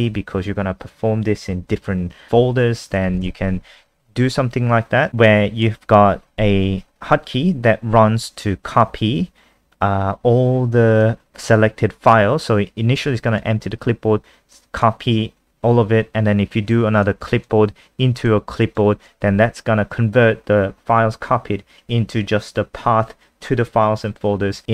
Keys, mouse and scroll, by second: 3.2 ctrl+s, 5.1 click.